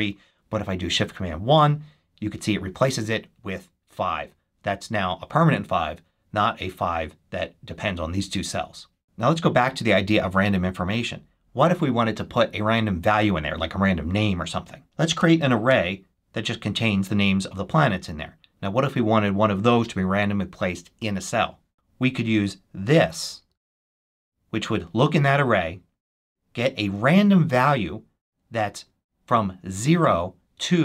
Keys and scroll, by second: 1.3 shift+super+1, 15.1 Return, 15.3 super+v, 15.6 super+Return, 16.5 Return.